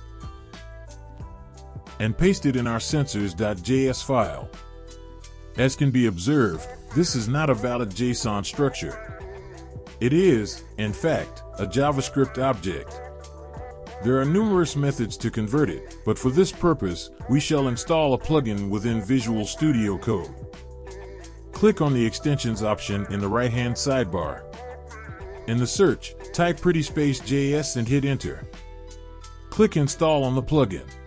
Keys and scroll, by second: 0.9 ctrl+x, 4.1 ctrl+v, 23.0-25.2 typing.